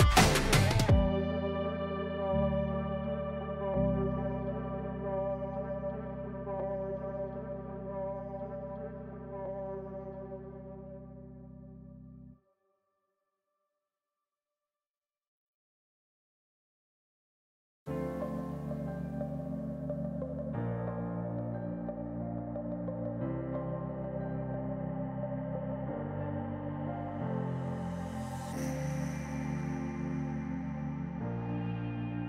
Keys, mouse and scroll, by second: 0.9 Delete, 1.2 middle click, 1.7 KP_1, 2.3 scroll up 1, 2.8 click, 3.4-4.6 drag, 4.6-5.8 middle drag, 5.8 click, 6.1 click, 6.7 Tab, 7.1-7.8 scroll up 1, 7.8 ctrl+r, 8.6 click, 8.7 Escape, 9.5 click, 10.4 scroll up 1, 11.0-11.4 scroll down 1, 11.4-12.1 middle drag, 12.1-12.5 scroll down 1, 12.5 click, 13.9 click, 14.2-15.7 drag, 16.0 drag, 16.3 scroll up 1, 16.6 scroll down 1, 16.8-17.9 middle drag, 17.9 click, 18.4 Tab, 19.2 ctrl+r, 20.9 click, 21.1-22.7 middle drag, 24.1 Tab, 24.2 drag, 24.4-25.0 scroll down 2, 24.5-24.8 middle drag, 25.2-25.6 scroll up 1, 25.6 click, 26.4-27.9 drag, 28.2 click, 28.9 click, 30.0 click, 30.5 click, 31.7-32.2 drag.